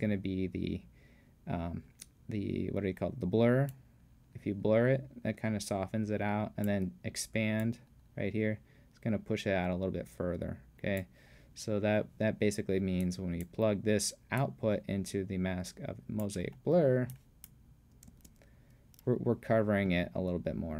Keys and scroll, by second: 18.1 space.